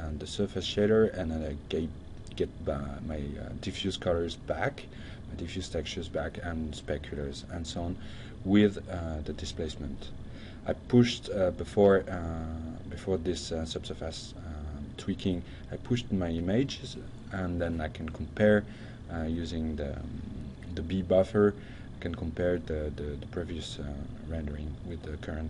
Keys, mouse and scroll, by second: 10.0-16.6 drag, 22.7 click, 23.7 shift+2, 24.0-25.4 middle drag.